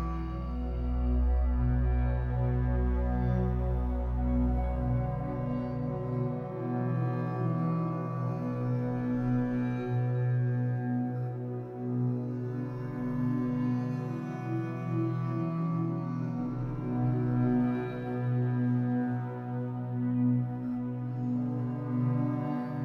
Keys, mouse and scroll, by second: 0.0-0.3 middle drag, 0.3 ctrl+a, 0.9-2.0 middle drag, 2.0 click, 2.7-4.1 drag, 4.1-5.9 scroll up 3, 5.9-8.9 drag, 9.2 scroll down 3, 9.4-10.1 middle drag, 10.1-11.1 scroll up 1, 11.1-14.2 drag, 17.0-17.9 scroll down 1, 17.9-20.7 drag, 20.7 scroll down 3, 20.9-21.3 middle drag, 21.3 ctrl+s, 21.6 click, 21.8-22.2 middle drag, 22.2-22.8 scroll up 3.